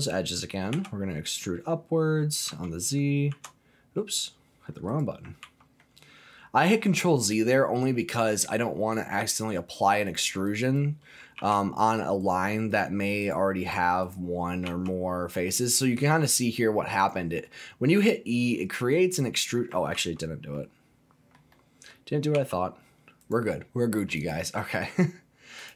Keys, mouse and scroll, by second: 0.7 e, 2.5 z, 3.2 s, 4.9 right click, 5.4 ctrl+z, 10.1 click, 10.4 click, 11.3 g, 12.2 right click, 12.7 click, 13.2 click, 13.6 click, 14.0 click, 14.6 g, 17.0 click, 17.4-19.7 middle drag, 19.9 ctrl+z, 20.5 ctrl+middle click, 21.5 middle click, 22.3 g, 23.2 click, 23.2 right click, 24.2 click, 25.6 click.